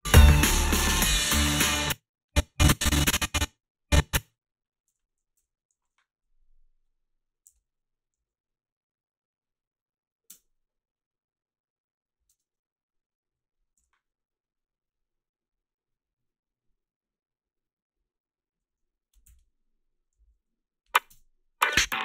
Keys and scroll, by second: 1.6 space, 4.6-6.2 typing, 7.5 h, 10.3 space, 12.3 space, 13.8 f, 19.2 h, 20.2 a, 21.1 space.